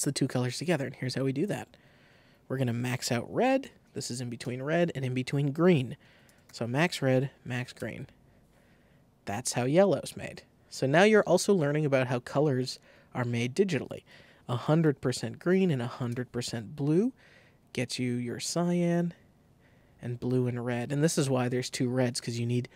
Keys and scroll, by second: 2.5 super+a, 3.1 super+2, 3.4 5, 4.3 Tab, 5.8-6.7 typing, 7.7 Return, 13.7 super+a, 14.3 super+2, 14.6-16.0 typing, 15.0 Tab, 16.0 Return.